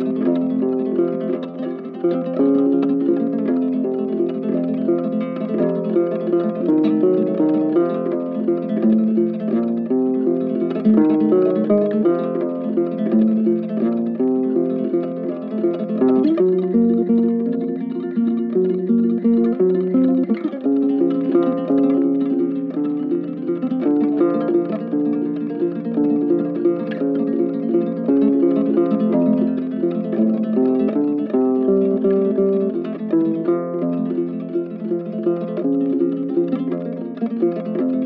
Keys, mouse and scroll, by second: 6.4 alt+click, 9.2 alt+click, 10.0 alt+click, 12.7 alt+click, 16.1 double click, 23.8 right click, 25.2 right click, 26.3 double click, 35.4 right click, 37.0 shift+click, 37.1 shift+double click, 37.2 shift+click.